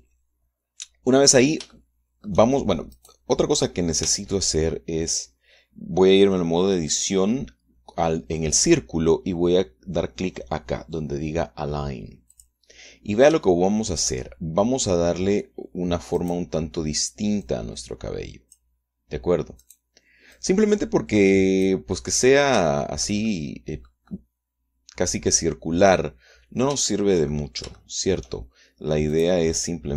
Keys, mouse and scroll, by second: 2.3 shift+click, 3.6 click, 4.6 Tab, 13.0 click, 14.0-16.8 shift+middle drag, 16.8 click, 18.0-19.4 drag, 20.2 click, 21.0-22.6 drag, 22.6-23.8 middle drag, 24.2 click, 24.7-29.0 drag, 29.8 click.